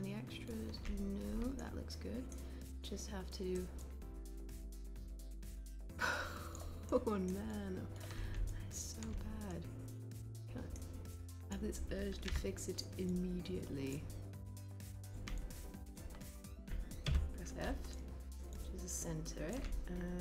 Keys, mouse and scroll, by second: 12.5 w.